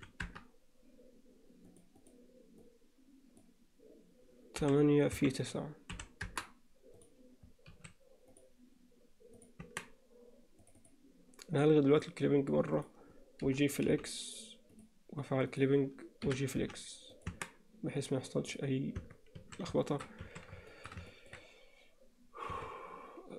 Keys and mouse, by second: 1.7-6.6 drag, 7.0 click, 7.7 s, 9.4 click, 9.7 Tab, 10.6 click, 11.9 click, 12.8 click, 13.5 g, 15.5 click, 16.3 g, 17.3 Tab, 19.0 Tab, 19.4 a, 19.9 shift+middle click, 20.3 a, 20.7 shift+middle click, 21.1 ctrl+middle click, 22.5 a.